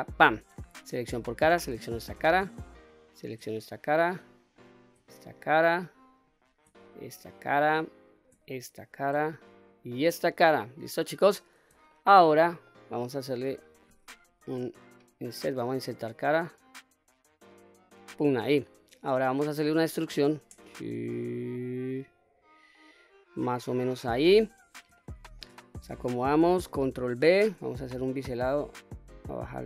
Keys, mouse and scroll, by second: 0.6 3, 1.1 click, 1.6-2.2 middle drag, 2.7 shift+click, 3.2-4.4 middle drag, 4.3 shift+click, 4.9-5.5 middle drag, 6.0 shift+click, 6.6-7.2 middle drag, 7.7 shift+click, 8.3-8.8 middle drag, 9.4 shift+click, 10.0-11.1 middle drag, 11.6-12.4 shift+middle drag, 12.9-13.5 middle drag, 14.0 i, 17.8 click, 18.3-19.1 middle drag, 19.7 e, 23.5 click, 24.7-25.2 shift+middle drag, 25.4-26.3 scroll up 2, 26.9 ctrl+b, 28.9-29.4 scroll down 1, 29.4 scroll down 1.